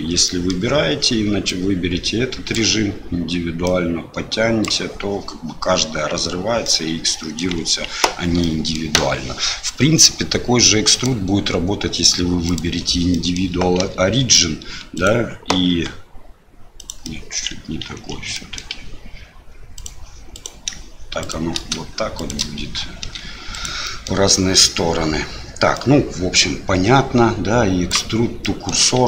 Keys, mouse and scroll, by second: 0.2 middle click, 1.5-4.9 drag, 6.6 middle click, 7.9 ctrl+z, 8.4 middle click, 11.0-12.6 drag, 13.1 middle click, 13.8 e, 15.7 s, 17.2 middle click, 17.8 ctrl+z, 18.3 middle click, 19.7 click, 20.3 click, 21.2 shift+click, 22.2 shift+click, 23.0 e, 23.9 middle click, 25.9-28.0 drag, 28.6 middle click.